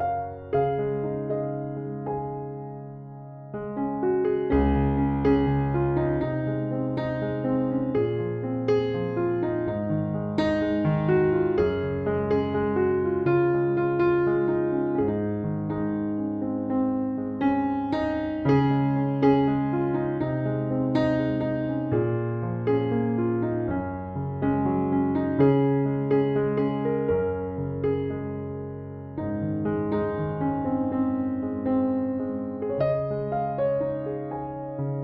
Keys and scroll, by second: 14.0 space.